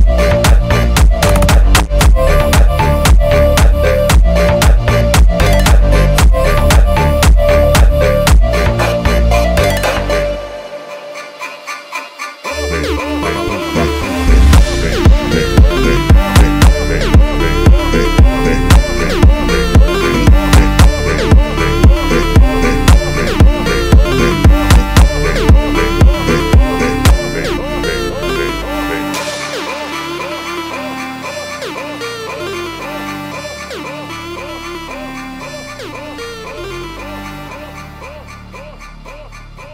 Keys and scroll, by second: 36.2 Right.